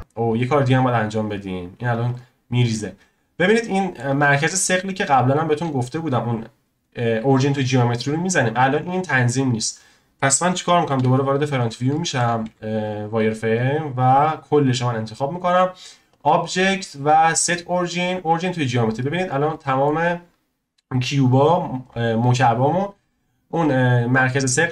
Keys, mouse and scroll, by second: 0.0 scroll up 1, 1.1 scroll up 2, 2.1-3.4 drag, 3.4 scroll up 1, 3.7-4.1 shift+middle drag, 4.1 scroll up 1, 9.5-10.3 scroll down 1, 10.9 KP_1, 11.4 scroll up 1, 11.6 scroll down 1, 11.9-12.4 shift+middle drag, 12.4 z, 13.2 click, 13.6 drag, 16.1-19.1 drag, 19.1-19.5 scroll up 3, 19.5-22.7 shift+middle drag.